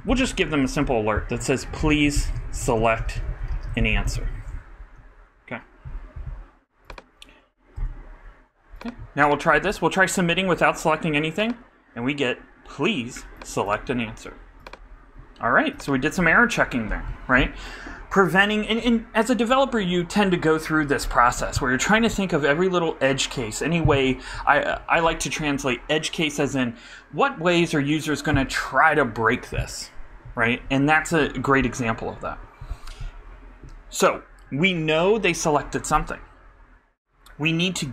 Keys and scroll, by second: 0.3-1.6 typing, 4.4 super+r, 4.7 super+Down.